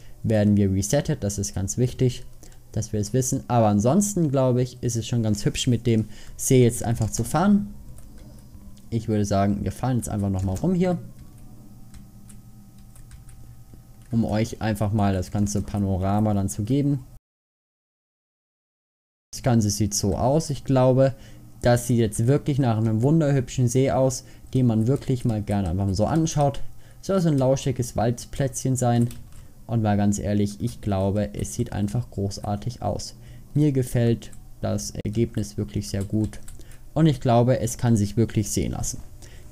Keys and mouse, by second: 33.2 middle click.